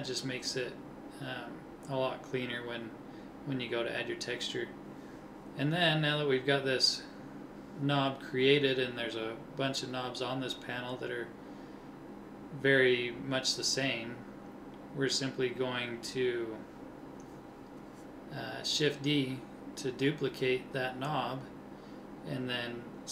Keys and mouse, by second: 1.0-2.5 drag, 2.5 KP_1, 11.4-12.4 middle drag, 13.5 KP_1, 17.8 shift+d.